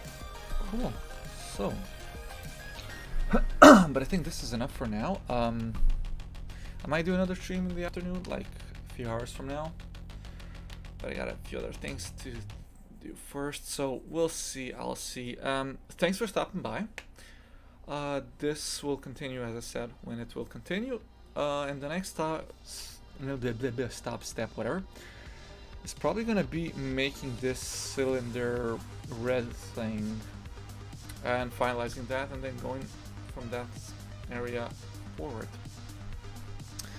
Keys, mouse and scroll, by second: 1.4 shift+f, 25.9-26.8 scroll up 5, 26.8-29.7 scroll down 1.